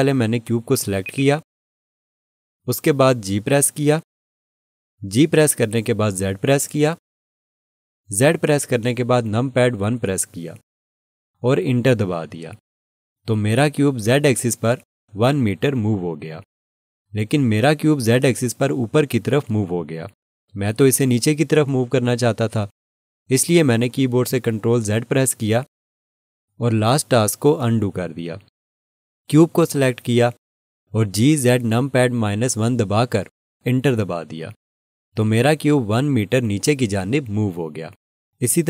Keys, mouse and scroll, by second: 1.0 click, 1.1 double click, 6.2 g, 6.6 z, 10.4 1, 12.7 Return, 25.0 ctrl+z, 31.7 g, 32.4 z, 33.3 -, 34.3 1, 35.2 Return.